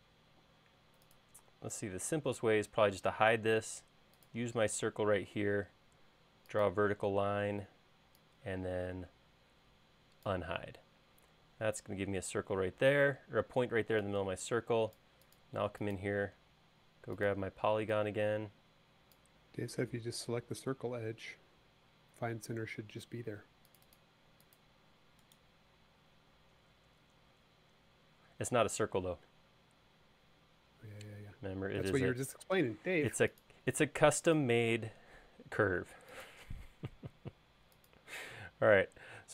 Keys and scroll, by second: 2.1 l, 7.1 space, 22.7 space.